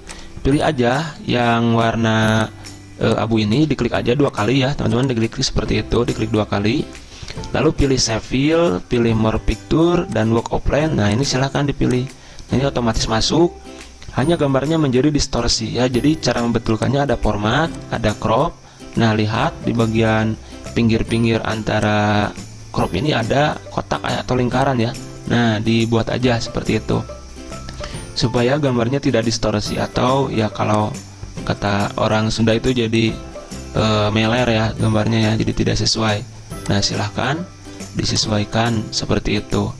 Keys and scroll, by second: 1.4 ctrl+z, 3.7 ctrl+z.